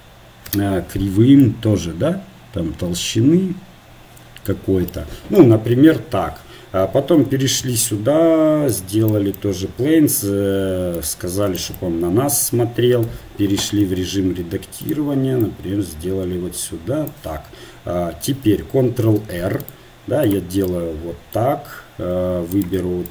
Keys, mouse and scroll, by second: 5.9 KP_1, 12.6 click, 13.0 Tab, 14.2 s, 15.4-17.5 drag, 19.6 ctrl+r, 22.8-23.1 drag.